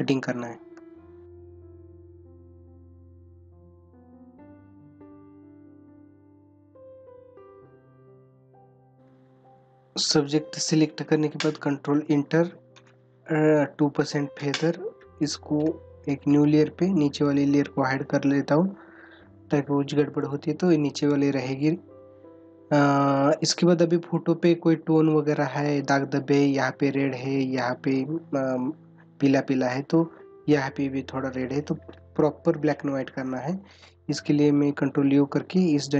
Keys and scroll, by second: 1.6 space, 5.5 space.